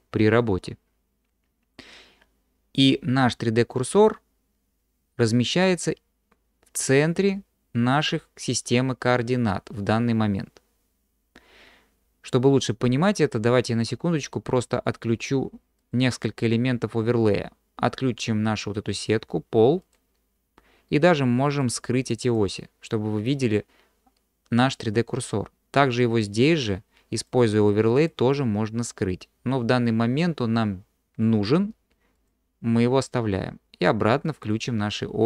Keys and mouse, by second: 16.0-24.7 drag, 27.2-35.2 drag.